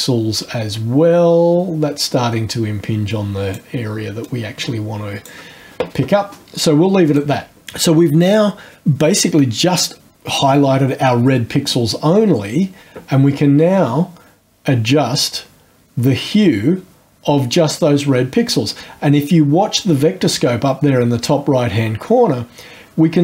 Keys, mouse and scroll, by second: 4.2-5.5 drag, 7.1 click, 12.4 scroll up 2, 12.7 middle click, 14.4-18.8 drag.